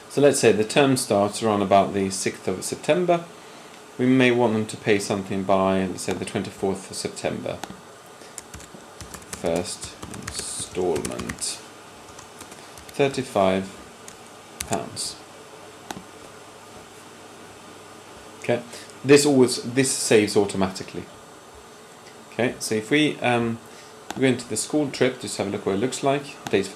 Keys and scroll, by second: 8.5-13.1 typing, 13.6 Left, 13.7 Left, 14.3-15.8 typing.